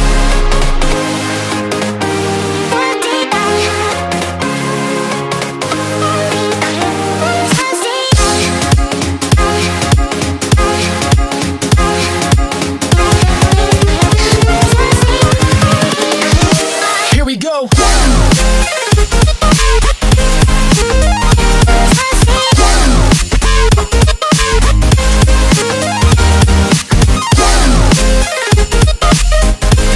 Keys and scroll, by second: 0.6 shift+F6, 1.6 1, 2.0 Return, 3.2 ctrl+l, 12.6 ctrl+d, 12.8 space, 15.2 ctrl+d, 19.7 shift+F6, 20.3 Return, 20.8 ctrl+l.